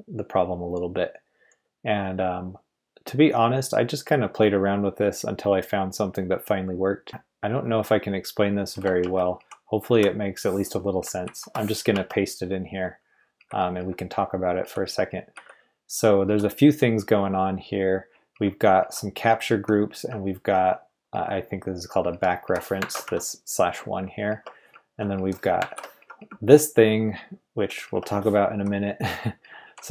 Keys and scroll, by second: 8.7 Return, 9.0 Escape, 9.3 k, 9.9 i, 11.2 super+v, 11.9 Escape, 13.4-16.2 typing, 18.3-19.5 typing, 21.1-23.0 typing, 22.8 ctrl+v, 24.3 Escape, 24.7-26.2 typing, 25.7 ctrl+v, 27.8 Escape, 29.2-29.9 typing.